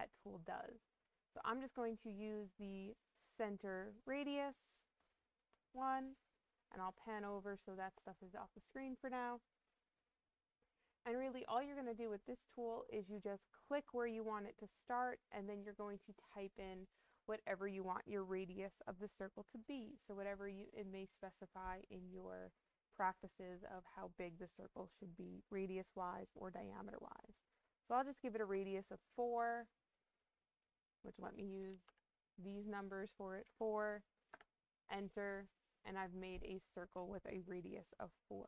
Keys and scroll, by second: 31.5 BackSpace, 31.8 4, 34.2 Return.